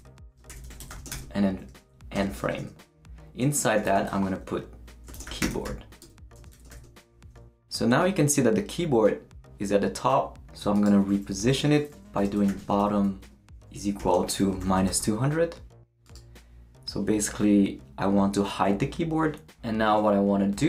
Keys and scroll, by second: 0.0-1.6 typing, 1.8 shift+Up, 2.1 Tab, 3.8 shift+,, 4.9-6.7 typing, 7.4 shift+super+., 11.4 Left, 11.6-15.4 typing.